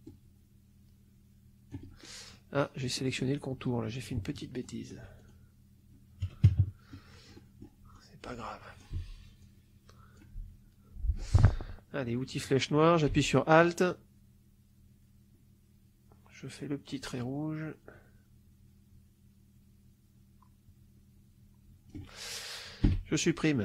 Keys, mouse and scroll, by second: 2.7 middle click, 4.5 shift+click, 5.1 shift+click, 7.2 middle click, 7.9 click, 8.8 Delete, 9.3 click, 10.3 Delete, 12.3 click, 13.5-22.0 alt+drag, 22.7 Delete.